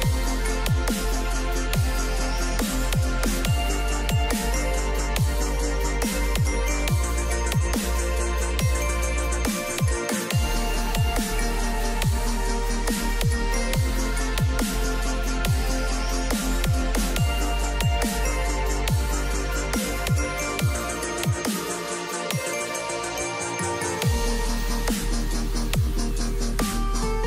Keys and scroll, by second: 14.3 ctrl+g.